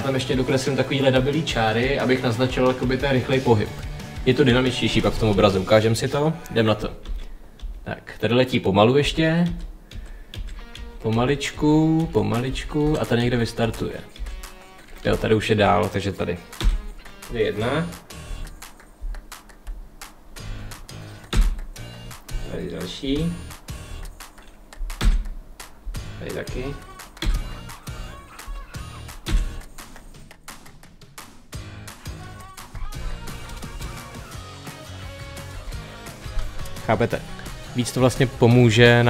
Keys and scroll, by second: 6.9 Page_Down, 8.9 Page_Down, 14.9 Page_Up, 16.4 Page_Down, 21.1 Page_Down, 24.9 Page_Down, 27.1 Page_Down, 29.1 Page_Down, 33.6 space, 35.3 space, 37.2 Page_Up.